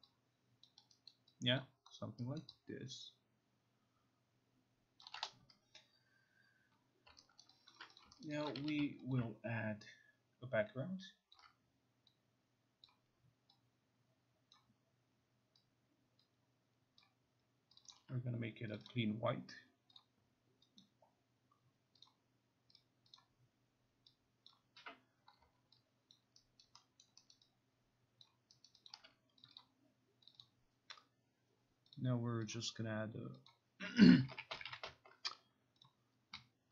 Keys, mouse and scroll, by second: 0.7 alt+click, 1.1 alt+right click, 1.7 alt+click, 2.5 alt+middle click, 5.1 alt+click, 7.1 alt+click, 7.5 alt+middle click, 7.7 alt+right click, 8.1 click, 8.3 alt+right click, 8.5 alt+click, 8.6 e, 9.2 alt+click, 11.4 ctrl+click, 12.9 click, 14.6 click, 17.1 click, 17.9 click, 18.0 click, 18.8 click, 18.9 click, 20.1 click, 20.9 click, 22.1 click, 22.8 click, 23.2 click, 24.5 click, 25.5 click, 26.2 alt+click, 26.7 alt+click, 27.1 alt+middle click, 27.1 alt+right click, 27.4 alt+right click, 27.4 alt+middle click, 28.3 alt+click, 28.9 alt+right click, 28.9 alt+click, 29.5 alt+click, 29.5 click, 29.7 click, 30.3 click, 30.5 click, 32.0 click, 32.6 click, 33.5 click, 34.0-35.1 typing, 35.9 click.